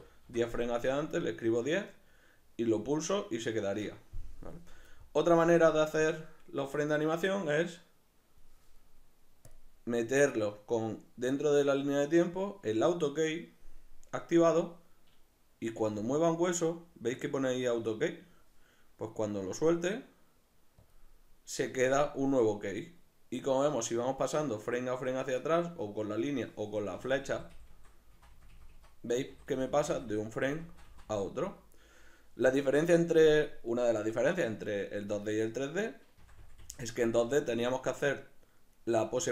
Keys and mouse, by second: 3.8 Escape, 6.0-13.6 drag, 15.8 g, 20.9 click, 23.4-31.0 drag, 26.9 Left, 27.7 Left, 28.2 Right, 28.7 Right, 29.3 Left, 29.8 Left, 30.5 Right, 31.0 Right, 36.2 Left, 37.0 Left.